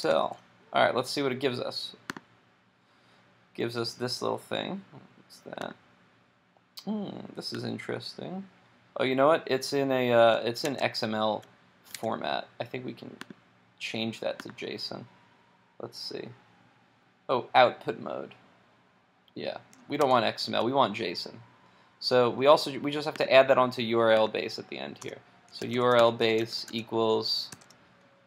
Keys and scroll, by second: 10.7 super+Tab, 12.1 super+Tab, 20.0 super+Tab.